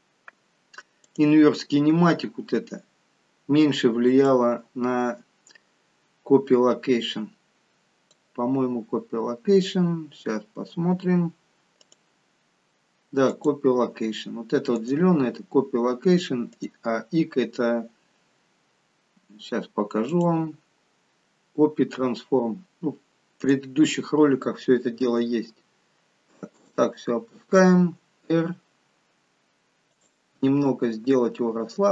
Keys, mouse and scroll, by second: 2.8-4.0 scroll down 5, 4.0 scroll down 1, 4.2 click, 11.8 click, 11.8-13.8 scroll up 10, 19.4-20.1 scroll up 6, 20.1 click, 25.1 g, 27.6 r.